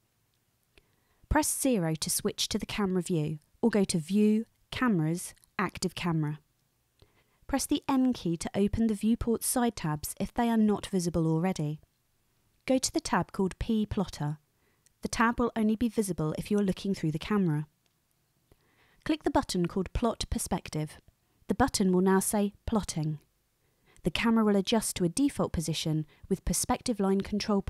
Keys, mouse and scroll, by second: 2.0 KP_0, 4.6-7.7 drag, 7.8 n, 14.1 click, 19.4 click.